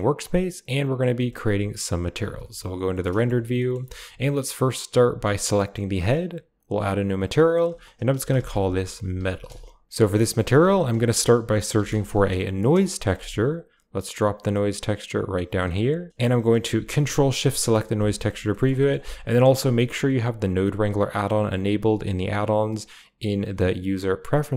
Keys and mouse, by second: 0.6 click, 1.2 shift+middle click, 2.1 z, 2.9 middle click, 3.6 middle drag, 4.5 click, 5.1 g, 5.6 middle click, 6.5 click, 7.4-9.4 drag, 9.9 middle click, 10.6 shift+a, 15.4 click, 15.8 g, 16.0 middle click, 16.1 click, 17.4 ctrl+shift+click, 18.0 middle click, 18.3 middle drag, 18.5 middle drag, 18.8 shift+middle click, 22.9-24.5 drag.